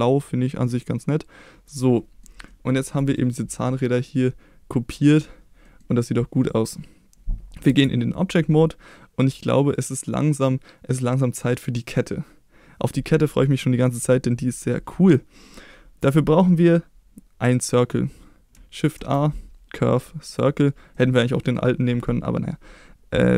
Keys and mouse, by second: 2.0 middle click, 2.5 middle click, 2.9 click, 3.6 middle click, 4.9 middle click, 5.6 middle click, 7.7 Tab, 19.0 shift+a, 20.9-21.5 middle drag.